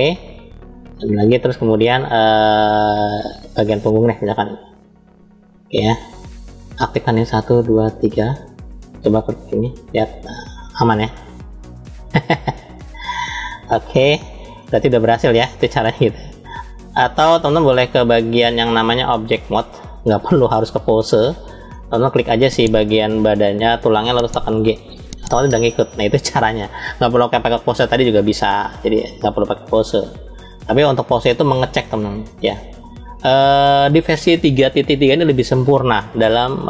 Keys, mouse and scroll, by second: 0.4 ctrl+z, 1.0-2.6 middle drag, 3.1-3.7 middle drag, 4.8-6.1 drag, 6.6 click, 7.4 shift+click, 7.9 shift+click, 9.4 click, 13.9 ctrl+z, 14.5-15.0 middle drag, 15.4-15.9 shift+middle drag, 16.1-16.9 middle drag, 16.1 scroll up 1, 17.8-19.4 drag, 20.8-21.6 shift+middle drag, 21.8 drag, 22.9 click, 24.3 g, 30.2-31.5 right drag, 31.5-32.7 drag.